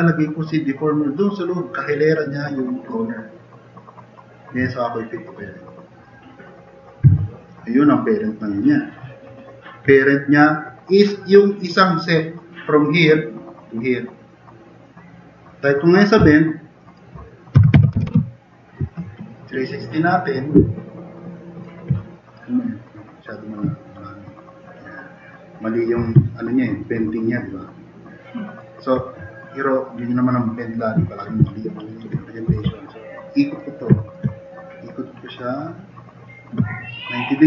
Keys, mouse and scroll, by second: 8.5-9.2 middle drag, 17.3-18.5 typing, 19.0 middle drag, 19.6-20.2 drag, 26.4 click, 27.2 drag, 27.8-28.6 drag, 31.5 drag, 32.5 r, 34.0 click, 35.4-37.4 drag.